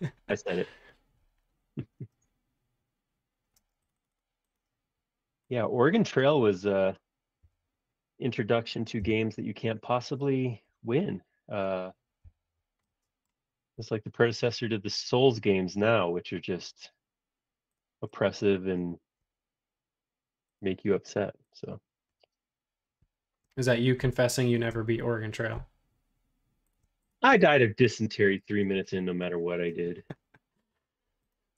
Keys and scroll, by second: 3.5 space, 7.5 l, 9.1 Up, 12.3 Up, 27.4 space, 28.9 e.